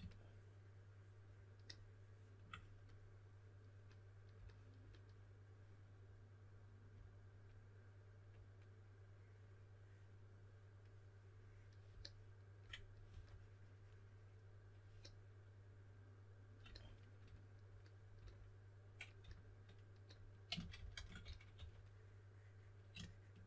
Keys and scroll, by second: 13.0 5, 19.1 s, 20.5-22.0 typing.